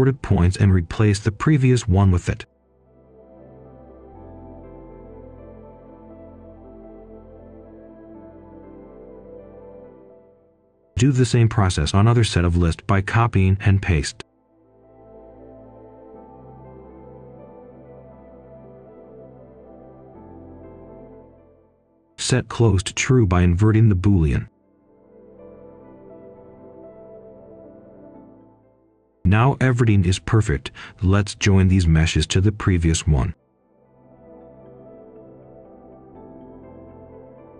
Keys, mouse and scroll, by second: 0.0-0.2 typing, 0.6-7.8 drag, 8.1 click, 9.1 shift+click, 10.5 ctrl+c, 10.9 ctrl+v, 11.4-16.8 drag, 19.8 ctrl+right click, 21.6 right click, 22.4 click, 23.4 right click, 24.6 click, 25.9 ctrl+right click, 27.4 ctrl+right click, 28.9 ctrl+right click, 30.0 right click, 30.6-31.3 scroll up 1, 31.3 click, 32.0-33.1 typing, 33.7-37.5 drag.